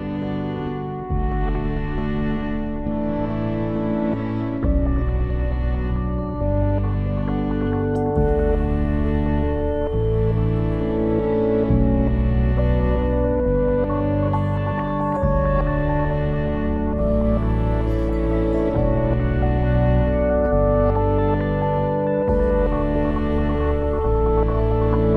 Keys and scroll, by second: 6.3 shift+l, 6.7 e, 7.8 Return.